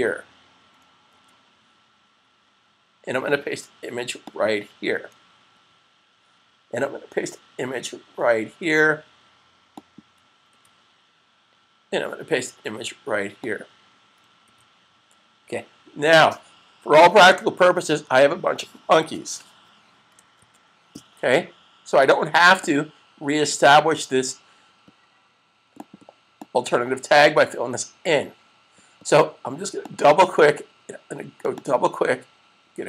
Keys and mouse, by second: 1.0 super+v, 4.2 click, 5.4 super+v, 9.6 click, 10.2 super+v, 13.2 click, 14.6 super+v, 20.2 super+s, 22.4 click, 25.5 click, 30.0 double click, 31.3 click, 31.4 double click.